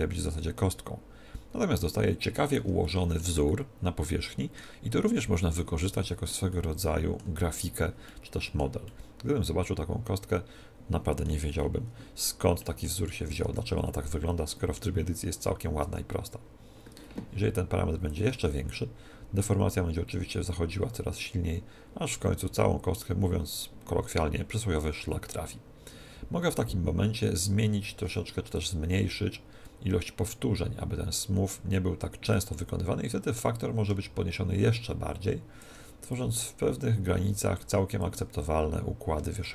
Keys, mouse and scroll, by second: 2.8-10.6 middle drag, 11.5-13.4 middle drag, 13.4 Tab, 15.8 Tab, 18.0 click, 28.5 click, 33.2 click, 36.1 click, 38.0 click.